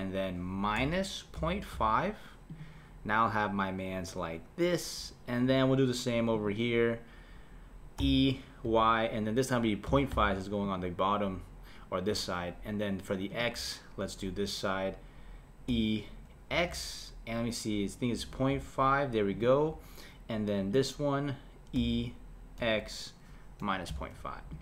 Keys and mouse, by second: 6.4 click, 8.0 e, 13.3 click, 15.7 e, 20.7 click, 21.8 e.